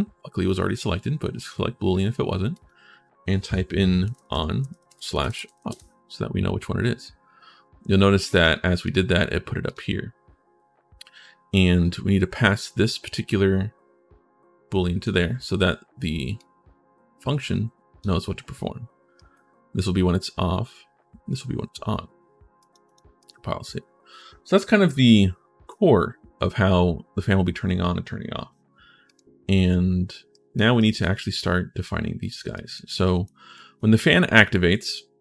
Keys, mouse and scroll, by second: 1.1 click, 2.3 click, 5.2 f, 8.1 click, 8.6 click, 9.4 click, 12.7-14.8 drag, 16.1-17.8 right drag, 18.9 right click, 22.4 click, 22.6 click, 22.9 right click, 28.9 right click, 30.1 right click, 30.5 right click, 32.3 right click, 32.8 right click, 33.3 click, 33.8-35.0 drag.